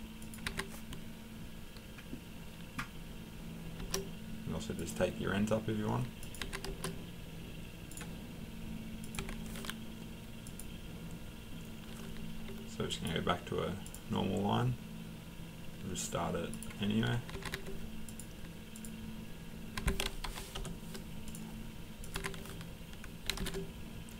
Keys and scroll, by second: 0.5 Escape, 6.4 Escape, 9.2 Escape, 17.3 Escape, 17.5 Escape, 19.8 Escape, 20.2 typing, 20.5 Return, 22.1-23.8 typing.